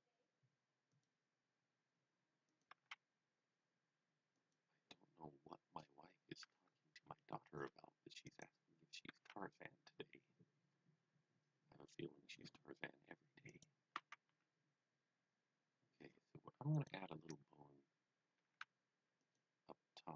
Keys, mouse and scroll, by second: 0.9 click, 2.4-3.3 typing, 2.4 click, 4.4 click, 8.2 click, 8.8-9.7 typing, 13.5 click, 14.1-14.8 typing, 16.7 click, 18.1-20.1 typing, 19.3 click.